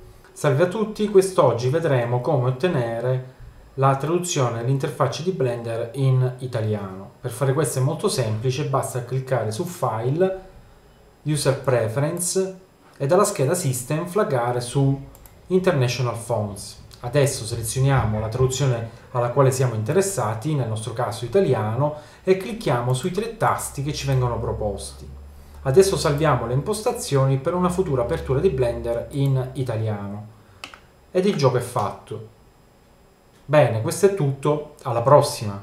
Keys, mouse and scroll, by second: 9.5-30.7 drag, 30.7-35.6 middle drag.